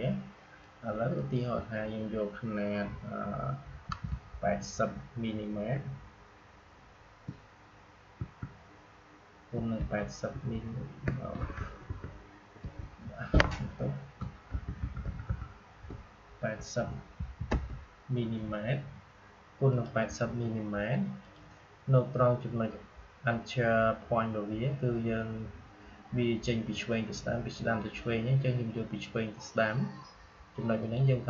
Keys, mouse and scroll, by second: 0.5-3.8 drag, 8.1 Tab, 10.2 Tab, 14.4 shift+Tab, 19.6 click, 30.7 click.